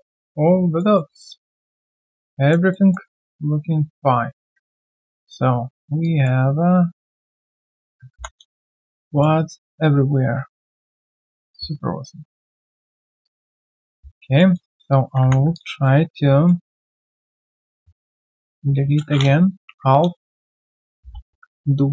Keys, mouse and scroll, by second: 0.9 alt+middle click, 1.3 alt+click, 2.7 alt+middle click, 3.1 alt+click, 4.9 right click, 5.2 q, 5.6 scroll down 1, 6.0 alt+click, 7.6 alt+click, 8.4 alt+click, 9.7 right click, 13.2 alt+click, 13.5 alt+q, 13.6 right click, 13.9 scroll down 1, 14.3 alt+click, 14.5 alt+middle click, 14.9 alt+click, 15.2 scroll down 1, 15.4 scroll, 15.5 alt+click, 16.1 alt+click, 16.7 right click, 19.5 Delete, 20.3 alt+click, 20.7 right click, 20.8-21.9 typing.